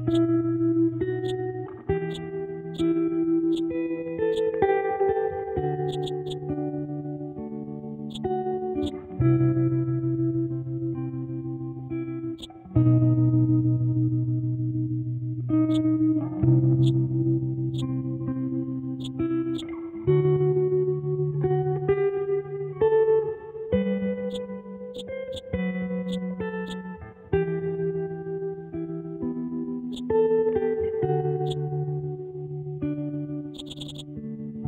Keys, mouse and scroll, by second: 4.7-5.6 scroll down 1, 5.8 click, 8.1 click, 12.4-15.7 drag, 16.8 click, 19.0-23.1 drag, 24.2-28.8 drag, 29.0-29.8 scroll up 1, 29.9-32.5 ctrl+drag, 32.5-33.5 scroll down 1, 33.5-34.6 drag.